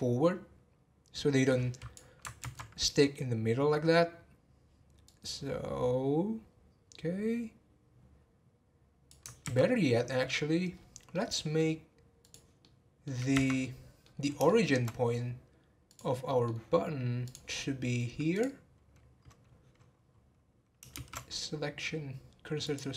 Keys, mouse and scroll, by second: 2.4 ctrl+z, 5.0 click, 9.4 ctrl+z, 10.7-11.1 scroll down 2, 11.1-12.2 middle drag, 12.2 click, 12.6-13.3 middle drag, 13.3 Tab, 13.6-15.8 middle drag, 15.8 click, 16.3 middle click, 17.2 click, 17.6 middle click, 18.3 click, 20.9 shift+s.